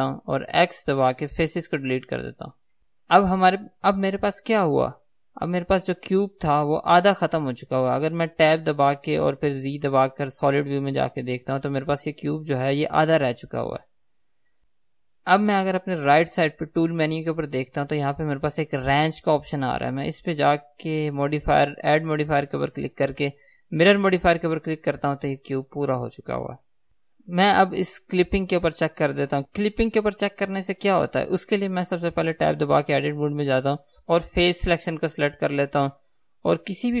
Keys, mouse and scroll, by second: 1.8 x, 5.5-17.9 middle drag, 8.2 Tab, 9.7 z, 11.8-14.7 scroll up 2, 20.6 middle click, 21.0 click, 24.3-36.0 drag, 29.5 Tab, 36.9-37.0 drag.